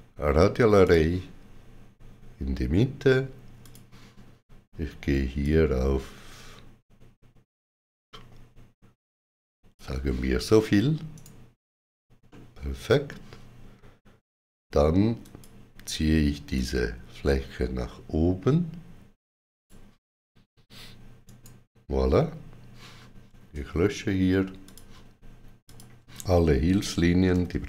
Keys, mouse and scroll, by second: 0.7 shift+click, 3.5 shift+click, 5.3 click, 11.0 right click, 12.1 middle click, 15.1 click, 16.4 click, 21.1 right click, 24.5 click, 25.5 shift+click.